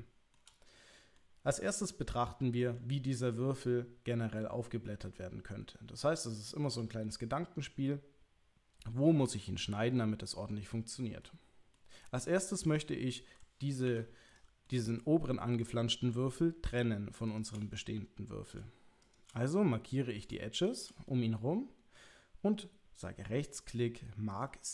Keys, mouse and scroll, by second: 1.1-2.6 middle drag, 3.6-6.6 middle drag, 7.4-9.8 middle drag, 11.2 middle click, 12.5 middle click, 13.9 2, 14.6 middle click, 15.6 middle click, 17.7 middle click, 19.5 middle click, 20.7 shift+click, 21.0 middle click, 22.9-24.5 right drag.